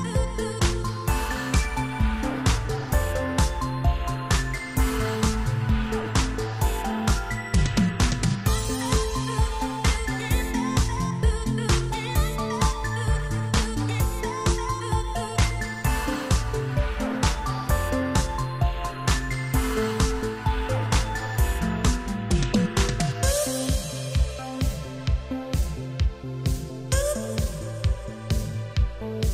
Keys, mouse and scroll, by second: 0.9 ctrl+z, 2.1 click, 2.2 click, 3.8 click, 6.4 click, 14.2 click, 18.9 click, 21.0 click, 21.8 shift+space, 22.7 Escape, 25.0 Delete, 25.1 Return, 26.6 click, 28.5 a, 28.8 scroll up 2.